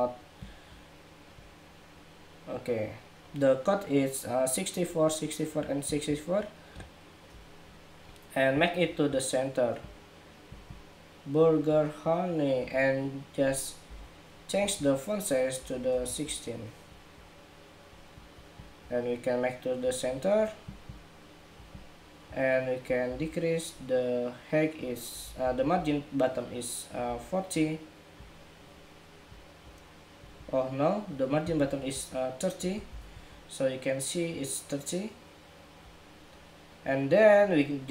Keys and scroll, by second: 22.8 alt+shift+Up, 25.2 alt+Down, 25.5 alt+Down, 26.8 alt+shift+Up.